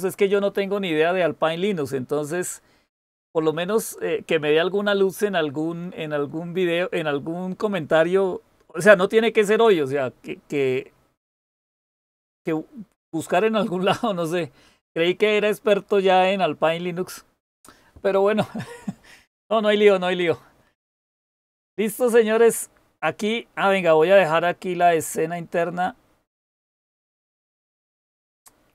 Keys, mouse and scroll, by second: 27.0-28.7 drag.